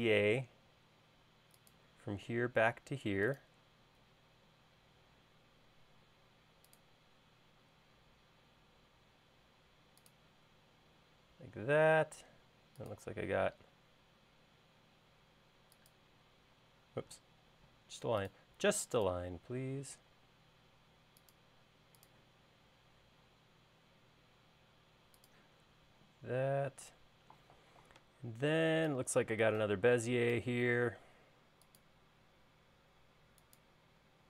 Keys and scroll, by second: 17.7-18.1 typing.